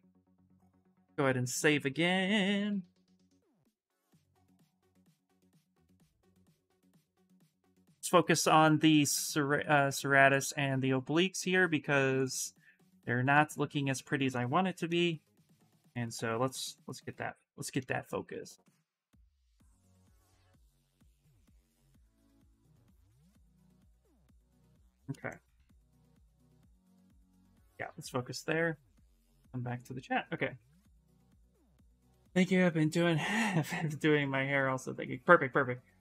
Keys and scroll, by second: 5.2 d, 6.3 a, 7.2 s, 16.9 s, 18.7 alt+Tab, 19.0 alt+Tab.